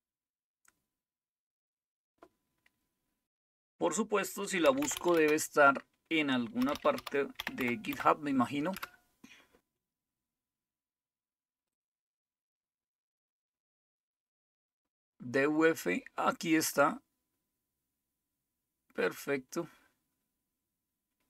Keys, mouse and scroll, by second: 0.0-1.0 scroll up 1, 1.0-2.1 scroll down 1, 4.4-8.9 typing, 11.7 click, 16.3 scroll down 1, 17.3-18.2 scroll down 2, 18.2-20.6 scroll down 2.